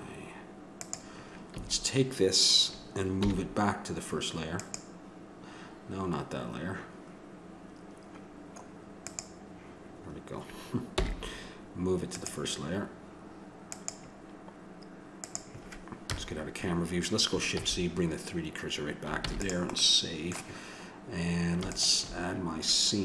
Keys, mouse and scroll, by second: 0.8-3.0 drag, 1.6 a, 3.2 m, 9.1-10.8 drag, 10.9 m, 13.7-16.3 drag, 16.1 KP_0, 17.5 shift+c, 19.2 ctrl+s, 19.8 click.